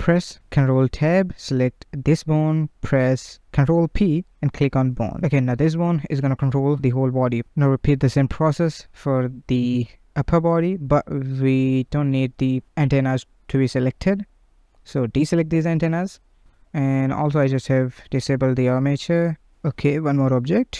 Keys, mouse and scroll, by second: 1.3 ctrl+p, 4.9 KP_1, 5.2-5.7 scroll down 1, 5.7-6.5 shift+middle drag, 6.5 ctrl+Tab, 6.8 z, 8.2 click, 9.6 z, 10.4-11.1 middle drag, 11.1 scroll up 2, 12.7 click, 13.4 middle click, 13.5 KP_1, 14.1 scroll up 2, 14.5-15.5 shift+middle drag, 15.5 shift+click, 15.7 shift+click, 16.3 shift+click, 16.5 shift+click, 17.3 shift+click, 17.8 shift+click, 18.8 shift+click, 19.1 shift+click, 19.5 scroll down 1, 19.8-20.5 shift+middle drag, 20.5-20.7 scroll up 2.